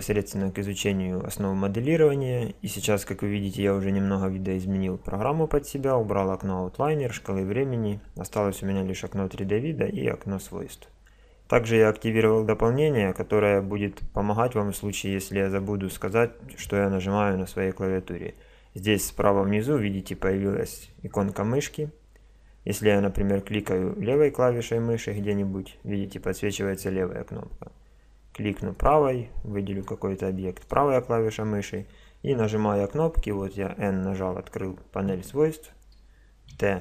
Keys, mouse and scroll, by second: 24.1-25.7 drag, 25.8-27.0 drag, 28.8-31.2 right drag, 32.6 n, 35.6 n.